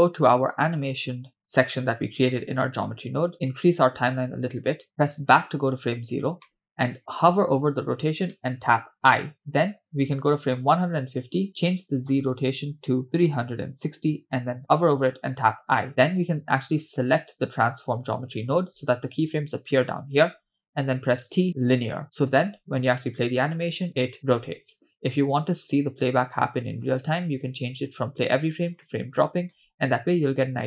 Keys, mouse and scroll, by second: 0.5-1.4 scroll up 2, 1.4 click, 2.8-3.4 scroll up 3, 3.5-4.7 drag, 5.4 Left, 6.4 middle click, 8.8 i, 10.7 click, 11.9-14.0 drag, 17.8 click, 21.0 t, 23.0 space, 24.7 space, 25.7-29.2 drag, 29.7 space.